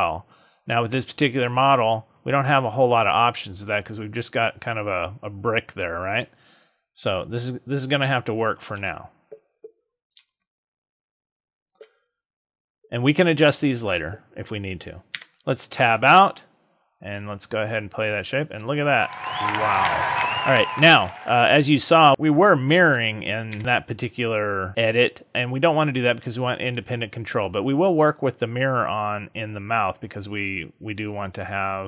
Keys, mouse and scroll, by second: 1.7-2.4 scroll up 5, 2.5 middle click, 8.7 KP_1, 9.5 scroll down 1, 10.2 shift+middle click, 15.1 Tab, 17.1 click, 23.5 Tab.